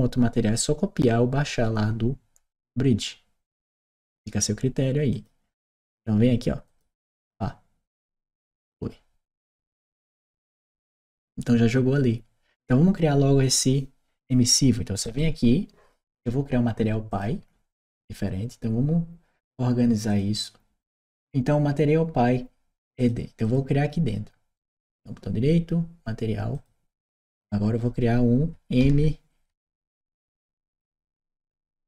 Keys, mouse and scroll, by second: 4.9 click, 6.5 click, 9.7 click, 14.9 right click, 16.9 click, 17.3-18.2 scroll up 1, 19.9 click, 22.8 click, 23.3 click, 24.4 right click, 26.3 click, 30.4 shift+e.